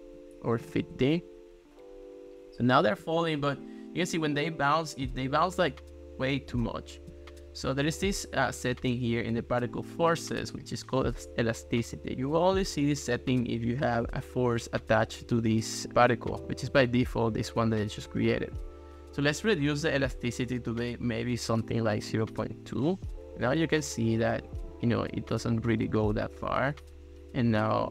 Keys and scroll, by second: 0.4-1.2 typing, 21.1 ., 21.6 2, 22.1 Return.